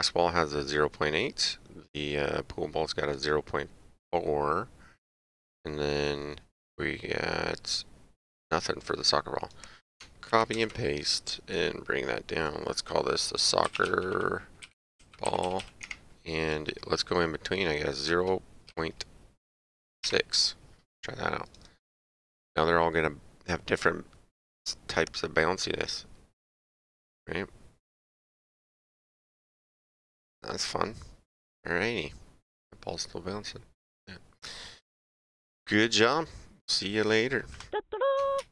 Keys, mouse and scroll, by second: 10.3 ctrl+c, 10.5 ctrl+v, 11.5 click, 15.8 Tab, 18.1 KP_0, 18.7 KP_Decimal, 20.0 KP_6, 37.5 click.